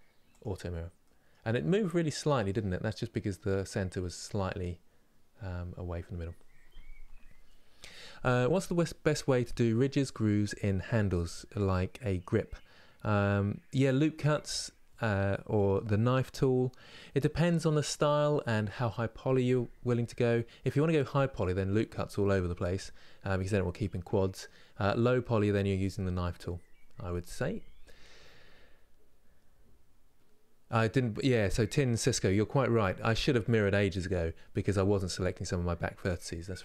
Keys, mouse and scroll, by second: 0.1 click, 0.7-36.6 middle drag.